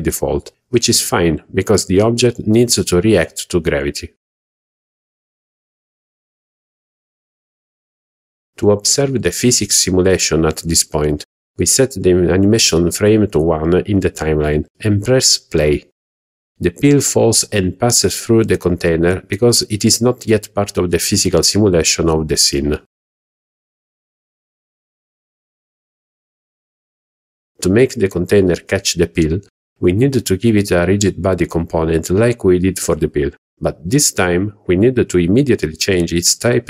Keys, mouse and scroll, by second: 4.4 shift+middle click, 4.4 scroll down 5, 5.9 click, 8.4 click, 9.7 click, 14.3 click, 16.6 click, 24.1 click, 30.7 click.